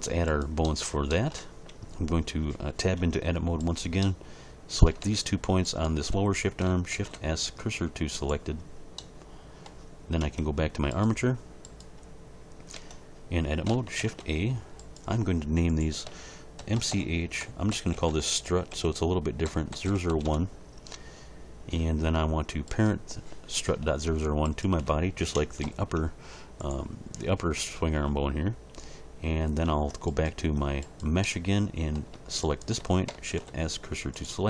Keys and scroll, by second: 3.0 Tab, 6.9 shift+s, 10.2 Tab, 12.8 Tab, 14.0 shift+a, 16.6-20.1 typing, 20.2 Return, 25.6 ctrl+p, 29.7 Tab, 33.3 shift+s.